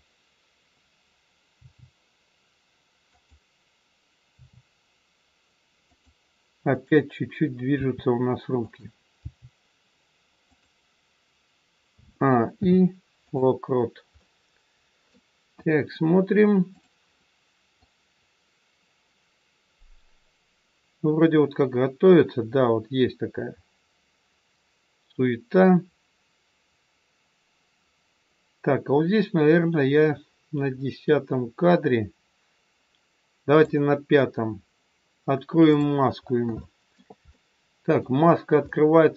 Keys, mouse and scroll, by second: 1.5 g, 4.3 r, 6.6 click, 7.6 r, 9.2 g, 11.9 a, 12.5 i, 14.1 middle click, 15.5 KP_1, 16.7 click, 17.7 click, 35.6 click, 36.1 scroll up 3, 36.5 shift+middle click, 37.2 middle click, 38.6 middle click.